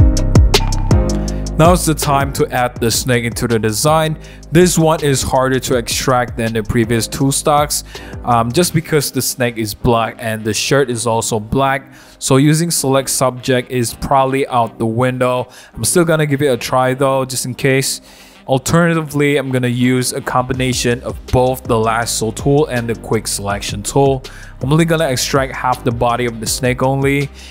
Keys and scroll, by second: 0.5 c, 7.2 Return, 7.6 v, 8.0 super+0, 11.0 w, 26.3 super+d, 26.9 w.